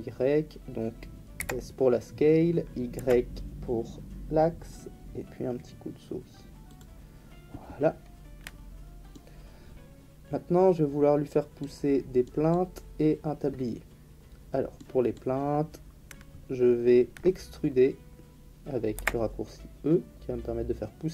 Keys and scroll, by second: 1.4 s, 2.9 y, 18.9 e.